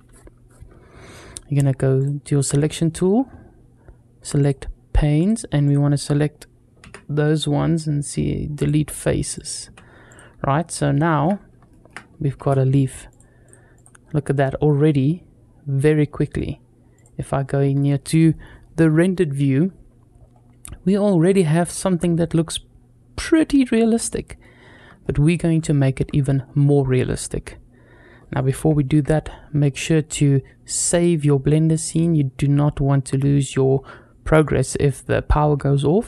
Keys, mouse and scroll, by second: 1.8 click, 2.2 scroll down 2, 2.7 shift+middle click, 4.2 click, 5.0 click, 5.5 click, 6.6 x, 9.2 click, 9.5 x, 10.4 scroll down 1, 10.7 shift+middle click, 11.1 scroll down 2, 11.5 shift+middle click, 12.9-13.3 drag, 13.6 click, 13.9-15.1 scroll down 2, 14.1-15.6 middle drag, 18.1 click, 19.5-20.4 scroll up 3, 20.8-21.2 scroll down 3, 21.2-24.2 middle drag, 24.5 scroll up 2, 24.8-25.2 shift+middle drag, 25.6 shift+middle drag, 28.7 ctrl+s.